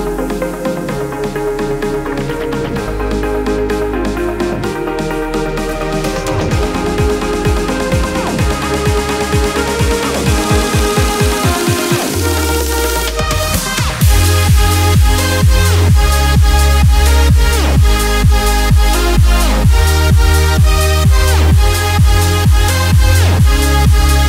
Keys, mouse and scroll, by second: 0.0-1.8 scroll up 1, 2.6 scroll up 1, 2.6-6.1 drag, 8.6 a, 9.7 click, 11.0 ctrl+d, 12.3 click, 12.5 space, 12.7 click, 13.1 space, 13.9 click, 14.7-16.2 alt+drag, 16.2-17.7 drag, 18.4 alt+scroll down 1, 18.9 space, 19.1 click, 19.4 space, 20.7 click, 21.3 alt+scroll up 1, 21.9 space, 22.0 click, 22.4 space, 22.8-24.2 drag.